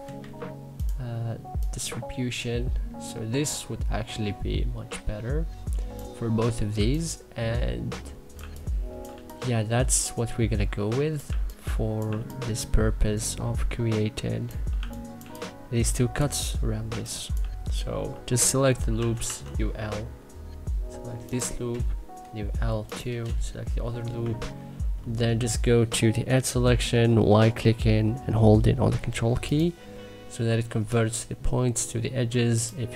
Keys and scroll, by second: 6.4 1, 8.0 2, 10.9 2, 11.7 1, 14.4 2, 18.6 u, 18.9 l.